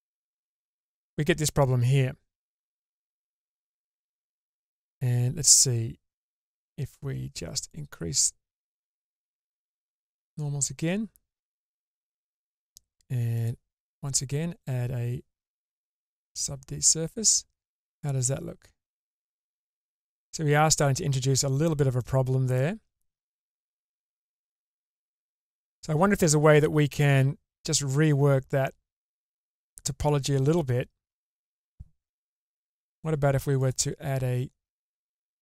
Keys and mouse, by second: 4.2 Tab, 6.4 click, 7.8-11.4 drag, 13.4 click, 17.2-18.2 middle drag, 19.0-20.2 middle drag, 22.0-22.6 middle drag, 23.6 Tab, 26.6-30.6 middle drag, 32.6 k.